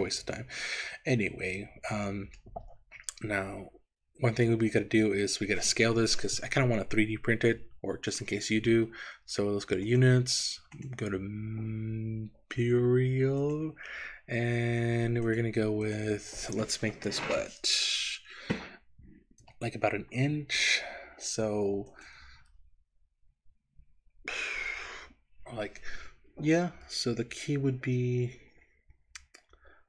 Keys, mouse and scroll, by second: 3.4 Tab, 8.1 click, 9.9 click, 10.8-13.7 drag, 15.3 click, 19.4 n, 22.0-29.8 drag.